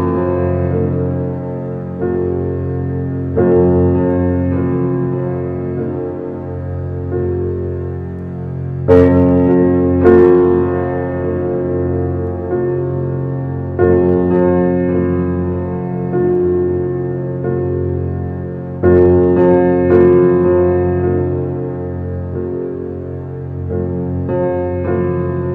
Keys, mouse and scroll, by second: 0.0 scroll up 1, 0.1-1.7 middle drag, 1.7 g, 2.9-3.2 middle drag, 3.2 click, 3.5 scroll down 1, 3.7-4.9 middle drag, 4.9 click, 6.2 shift+d, 8.5 alt+middle drag, 9.5 g, 10.7-11.1 scroll up 3, 11.1 alt+middle click, 11.5 shift+middle drag, 11.7 shift+scroll up 1, 11.8-12.4 scroll down 4, 12.4 g, 14.5-15.4 middle drag, 15.6 alt+middle click, 15.9 scroll up 5, 16.1-17.5 shift+middle drag, 17.5 g, 22.4-23.1 middle drag, 23.1 click, 23.6-24.6 middle drag, 24.6-25.0 scroll down 1, 25.0-25.5 middle drag.